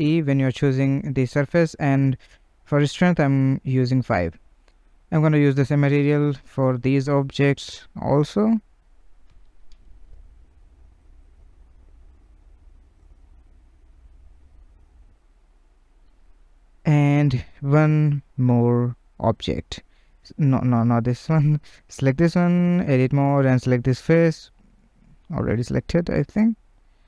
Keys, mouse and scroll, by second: 2.7 middle click, 3.4 Tab, 3.8 click, 4.1 Tab, 4.2 click, 6.4-9.7 drag, 9.7 middle click, 10.3 Tab, 10.5 click, 10.8 Tab, 10.9-15.3 drag, 15.3 middle click, 15.6 Tab, 16.1 scroll, 16.4-17.9 middle drag, 17.9 Tab, 18.1 click, 18.7 Tab, 18.9 click, 19.2 Tab, 19.6 click, 20.9 Tab, 21.3 click, 22.2 Tab, 24.0-25.3 middle drag, 25.6 middle click.